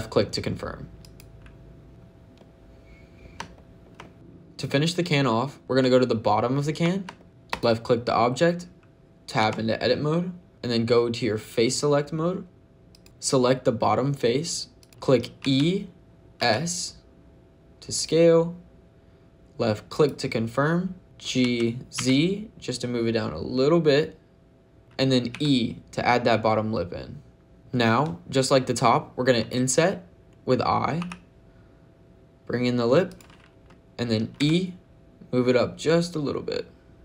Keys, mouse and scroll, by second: 0.8 click, 5.8 shift+middle click, 7.2 middle click, 7.3 click, 9.2 Tab, 12.7 click, 14.6 click, 15.3 e, 18.7 s, 19.8 click, 21.3 g, 21.8 z, 24.8 ctrl+z, 24.8 click, 24.8 e, 25.1 e, 27.5 click, 30.8 i, 32.9 click, 34.2 e.